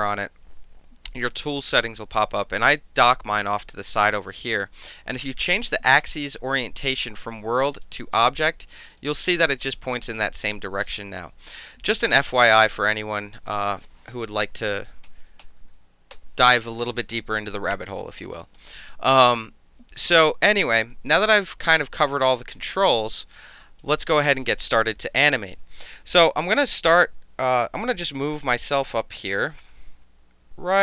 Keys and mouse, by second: 6.9 click, 7.7 click, 9.0-10.9 drag, 11.1 ctrl+z, 12.2 click, 13.4 click, 15.1 KP_0, 15.3 Tab, 15.4 KP_0, 15.6 Tab, 16.1 KP_Enter, 18.5 click, 20.1-20.4 alt+drag, 20.6 alt+right drag, 21.0-21.4 alt+drag, 21.8-22.2 alt+drag, 22.8-23.8 alt+drag, 24.1 alt+right click, 24.3 alt+click, 26.4 click, 27.7-30.8 drag.